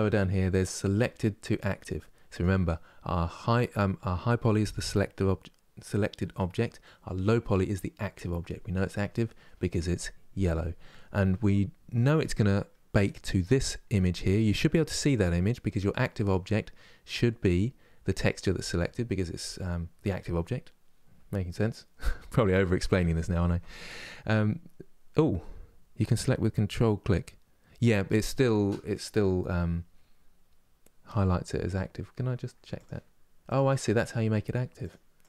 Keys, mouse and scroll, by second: 33.3 ctrl+click, 34.6 ctrl+click, 35.0 ctrl+click.